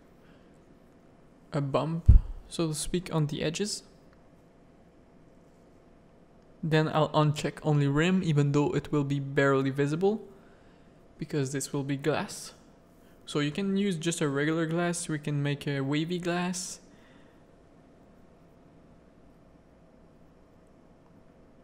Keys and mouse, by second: 0.4 z, 0.9 click, 1.3 middle click, 1.9 z, 2.3 shift+middle click, 4.8 click, 7.0 click, 8.1 click, 10.3 click, 10.5 click, 11.3-15.9 drag, 16.9 z, 17.7 alt+a, 18.3 click, 19.3 z.